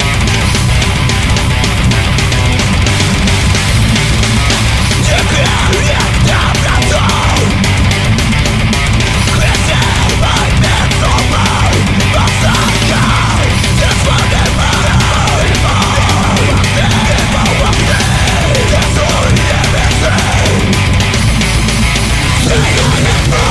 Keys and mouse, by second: 8.6 ctrl+z, 22.3 ctrl+z, 22.6 ctrl+z.